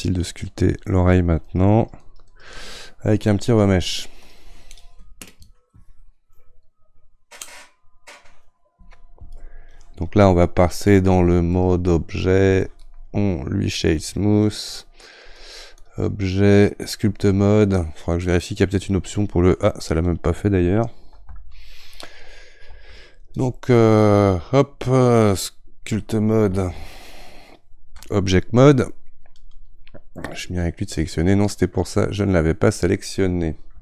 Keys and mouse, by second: 1.4-23.1 ctrl+drag, 23.1 Tab, 23.4-24.4 drag, 24.4 Tab, 28.0 ctrl+Tab, 30.5 click, 31.8-33.8 right drag.